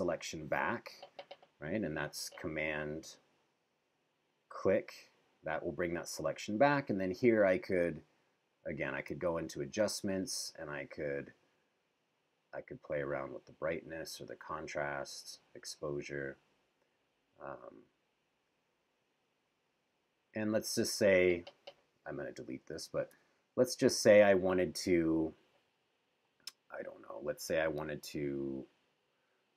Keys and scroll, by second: 9.3 super+-, 23.1 BackSpace.